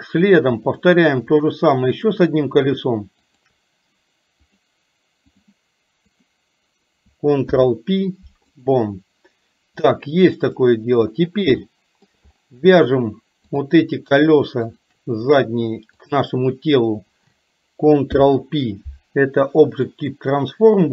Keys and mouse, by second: 0.7 click, 3.5 shift+click, 4.6-5.6 drag, 7.5 ctrl+p, 10.1 click, 11.7 shift+middle click, 13.5 click, 14.7 shift+click, 18.1 ctrl+p.